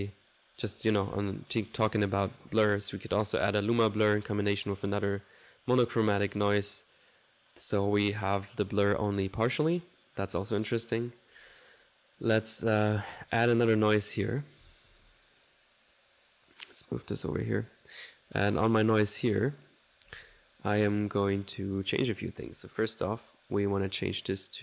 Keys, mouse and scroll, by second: 4.2-5.0 typing, 4.3 click, 9.4 click, 10.0 click, 13.5 right click, 13.7-16.1 typing, 14.0 click, 15.6 click, 16.1 click, 16.7 click, 17.7 click, 18.2 click, 18.8-19.9 drag, 20.8 middle click, 22.5 click.